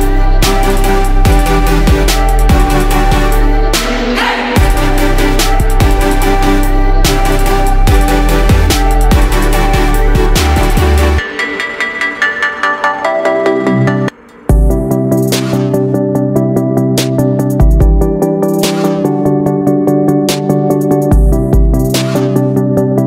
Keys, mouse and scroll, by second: 1.3 ctrl+d, 1.8-5.0 drag, 5.8 shift+click, 7.5 click, 11.0-12.0 right drag, 13.0-14.8 drag, 16.3 ctrl+d, 16.9-23.0 drag.